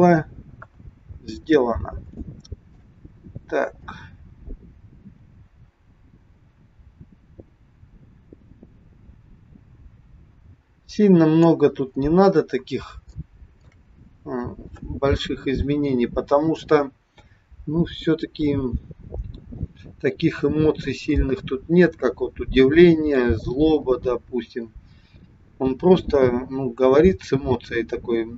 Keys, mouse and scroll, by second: 0.5 KP_1, 1.4-2.0 scroll down 5, 2.3 shift+middle click, 3.9 click, 12.1-12.9 scroll up 4, 13.1 shift+middle click.